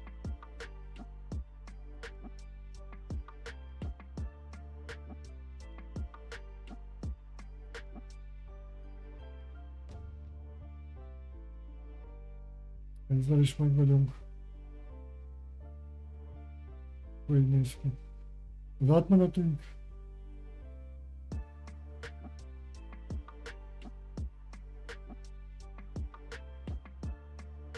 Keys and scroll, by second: 20.1 Escape, 20.2 Tab, 20.3 Caps_Lock, 21.6-23.0 typing.